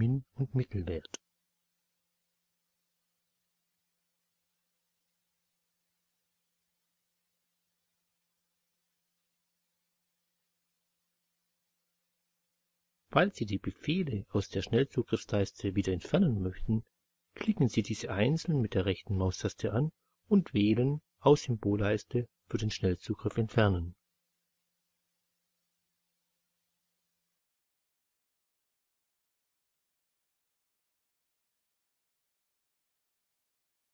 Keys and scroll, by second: 1.3 2, 9.5 3.